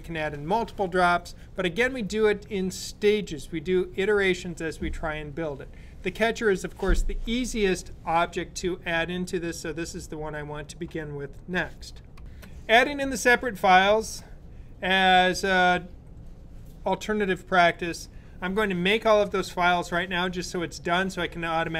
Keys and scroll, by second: 12.2 s.